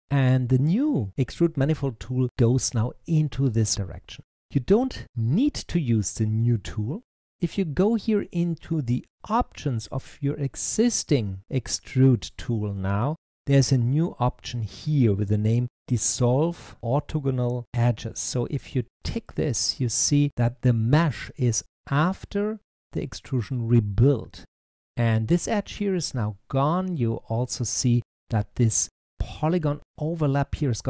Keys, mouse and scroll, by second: 13.0-15.7 drag, 18.9 click, 19.5 click, 22.7 click.